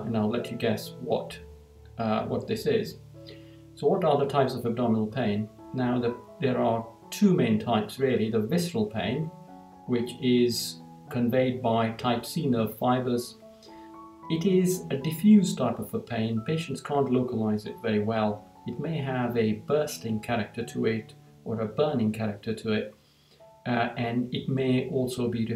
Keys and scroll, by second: 2.4 Down.